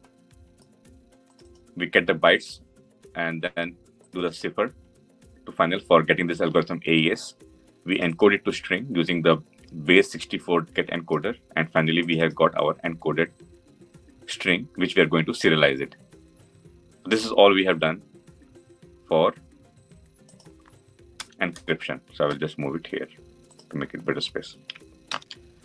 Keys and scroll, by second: 24.9 ctrl+alt+l.